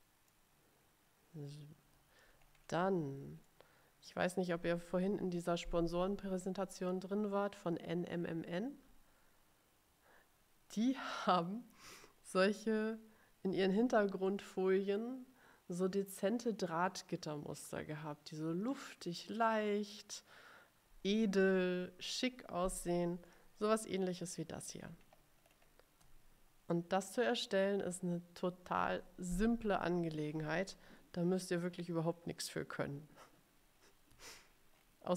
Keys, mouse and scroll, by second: 2.3-3.1 ctrl+scroll up 2, 3.6 middle click, 3.8 click, 4.0 middle click, 4.1 click, 23.4 middle click, 24.7-25.9 ctrl+scroll up 4, 34.0-35.1 scroll down 6.